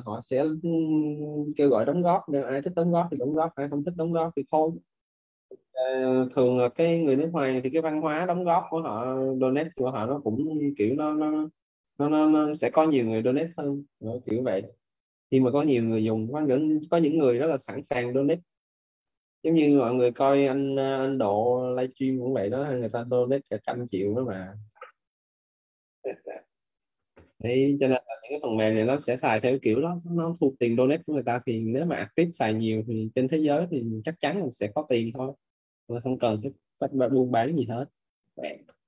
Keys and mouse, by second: 5.6 p, 25.0 KP_Enter, 29.0 right click, 31.7 click, 34.0 click, 35.5 right click.